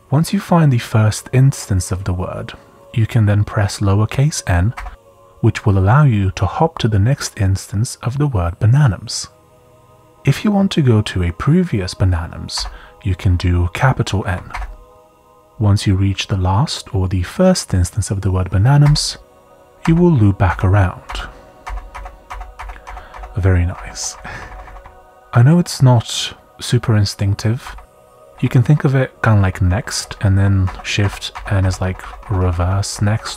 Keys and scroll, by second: 4.5-5.2 typing, 8.1 typing, 12.3-13.0 typing, 14.5 shift+n, 18.8 shift+n, 19.8 shift+n, 24.1 n, 25.1 shift+n, 25.2 shift+n, 27.6-31.3 typing.